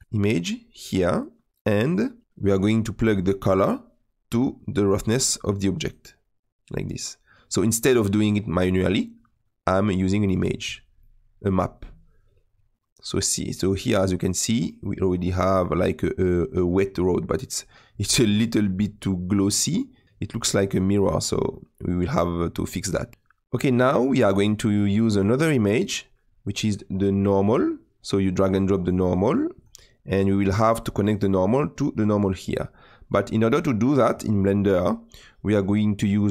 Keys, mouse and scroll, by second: 0.2-5.9 drag, 10.3 click, 11.0-14.6 middle drag, 17.9-18.3 scroll up 1, 18.3-21.2 middle drag, 21.2-21.5 scroll down 1, 21.5-26.6 middle drag, 30.4-36.3 drag.